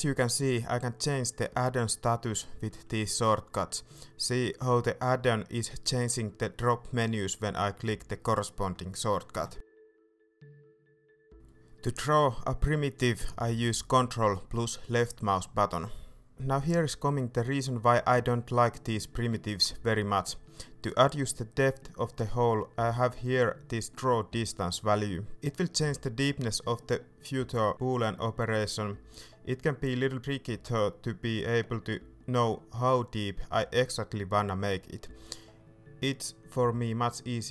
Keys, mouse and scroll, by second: 0.0 p, 0.6 p, 1.3 p, 1.9 p, 2.9 p, 12.6 KP_5, 13.8-15.3 scroll up 1, 15.3-21.1 ctrl+drag, 22.2-37.5 drag.